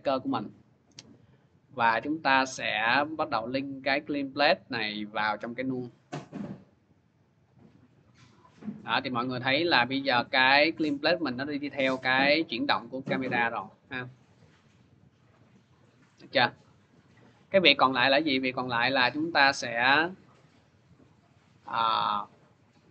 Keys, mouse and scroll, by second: 2.6 click, 3.4 click, 5.6 click, 6.2 click, 7.2 click, 11.3-12.3 drag, 15.1 click, 17.2 click, 18.9 click, 21.4 click, 22.4 click.